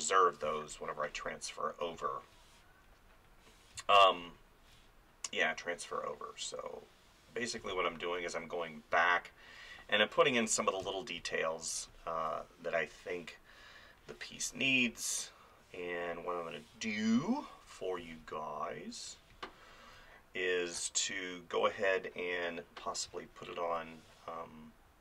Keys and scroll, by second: 0.5 space, 3.8 space, 7.6 space, 10.8 space, 18.0 space, 23.1 space.